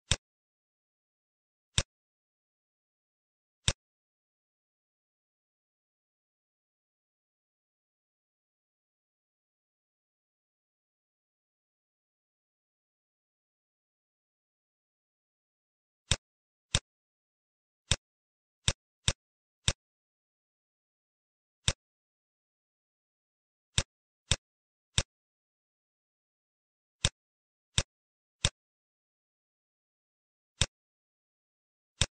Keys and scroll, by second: 1.3 z, 5.0 Page_Down, 6.8 Up, 7.7 Down, 8.1 Left, 10.0 Page_Down, 13.5 ctrl+shift+f.